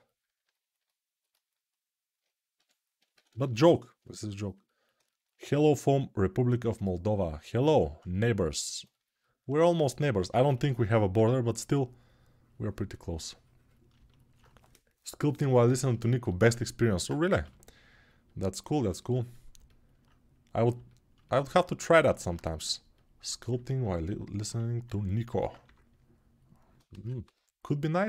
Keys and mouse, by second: 2.3 g, 10.9 3, 17.2 g, 27.0 3.